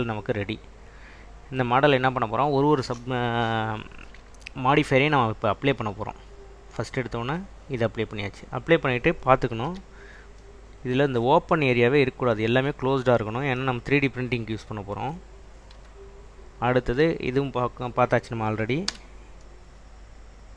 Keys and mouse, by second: 6.7-8.1 drag, 9.8 /, 15.9 /, 17.0 click, 19.0 /, 19.5 middle drag.